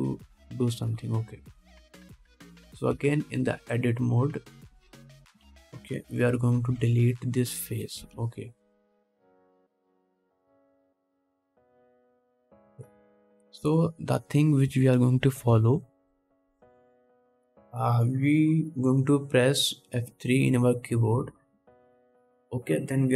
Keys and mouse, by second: 2.5-3.5 drag, 3.5 middle click, 3.6-6.3 drag, 6.3 Tab, 6.7 alt+a, 7.3 3, 7.6 middle click, 7.9 x, 9.2 ctrl+Tab, 9.9-14.9 drag, 11.1 middle click, 11.1 right click, 14.9 Tab, 15.9 1, 18.7 2, 21.2 F3.